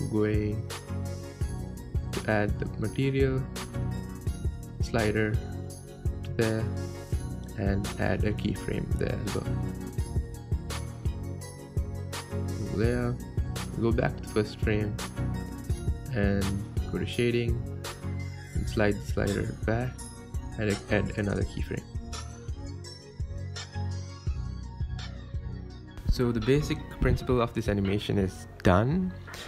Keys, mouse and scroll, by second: 0.7-2.3 drag, 2.3 KP_0, 4.0-7.0 drag, 11.0-13.7 right drag, 13.7 click, 15.4-19.0 drag, 20.6-24.6 drag, 24.6-25.1 right drag, 25.1 space.